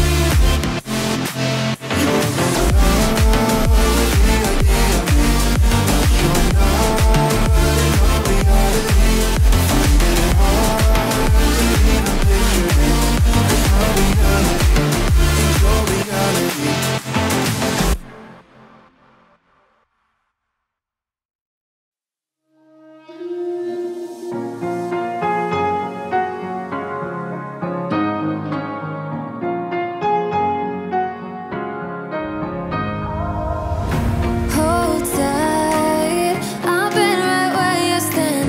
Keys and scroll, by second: 6.0 w, 6.2 e, 7.1 b, 10.2 s, 10.6 i.